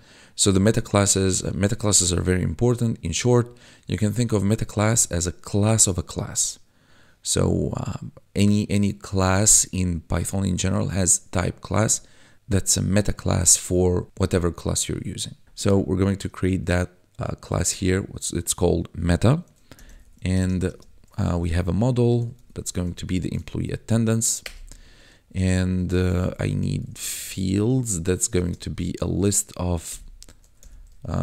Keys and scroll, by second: 19.7-20.6 typing, 22.2 shift+e, 22.3 m, 22.5 p, 22.9 Tab, 23.5 ctrl+s, 24.4 Return, 25.9-27.0 typing, 28.2 =, 28.3 space, 28.7 [, 29.8 ', 30.4 e, 30.6 m, 30.8 p.